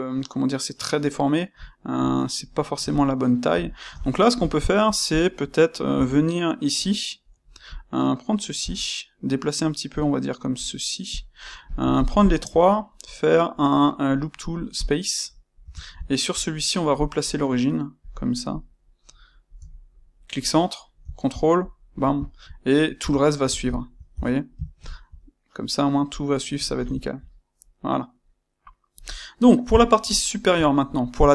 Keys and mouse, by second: 5.0 click, 5.8 Tab, 7.6 click, 8.5 g, 10.5 click, 11.0 click, 11.6 click, 11.9 shift+click, 12.1 shift+click, 12.7-15.9 right drag, 15.5 Tab, 15.9-17.9 shift+middle drag, 17.9 click, 19.6 g, 21.6 ctrl+click, 22.2-31.3 ctrl+middle drag, 22.9 Tab, 24.1 Tab, 29.5 KP_1.